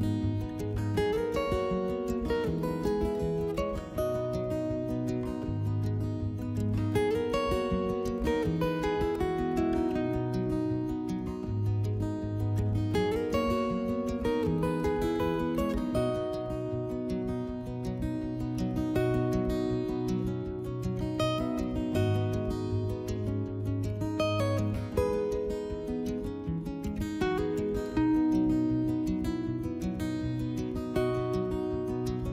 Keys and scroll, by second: 2.0 s, 5.9 s, 8.2 s, 13.7 s, 16.4 s, 18.6 s, 21.6-22.9 typing, 25.8 s, 28.9 4.